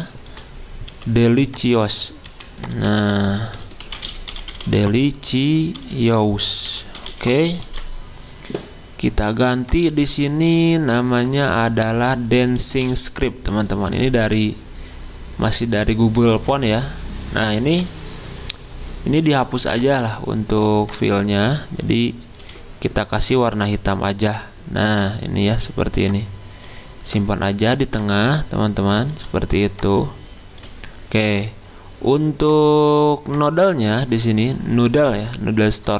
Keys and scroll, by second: 0.9 typing, 3.0 ctrl+a, 3.6-7.6 typing, 7.7 ctrl+a, 12.4-13.1 typing, 22.4 d.